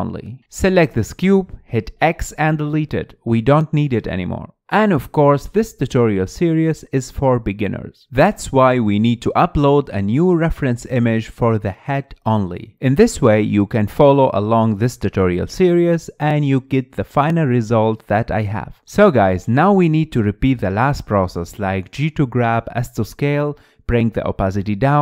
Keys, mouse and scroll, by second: 0.9 scroll down 2, 1.2-2.8 shift+middle drag, 2.8 x, 4.4-7.4 middle drag, 7.7-10.7 middle drag, 11.1 scroll up 1, 11.4-13.4 middle drag, 13.4-13.8 drag, 15.2-15.6 drag, 15.6-18.4 middle drag, 18.4 KP_1, 19.0-19.8 scroll up 2, 19.8 scroll up 1, 20.0 shift+a, 20.5-21.1 shift+middle drag, 21.5-22.0 scroll up 2, 22.0 s, 22.4 scroll up 1, 22.5 shift+middle click, 22.7 g, 23.1 s, 23.5 click, 24.0 scroll up 4, 24.1 shift+middle click, 24.6-25.0 typing.